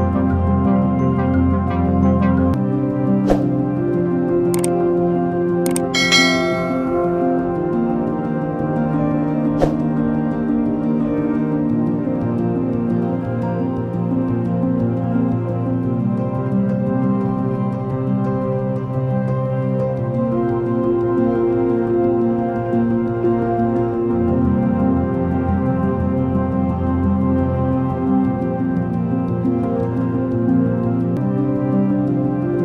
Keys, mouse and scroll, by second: 1.7 Delete, 9.4 Return, 13.4 Return, 17.3 Return.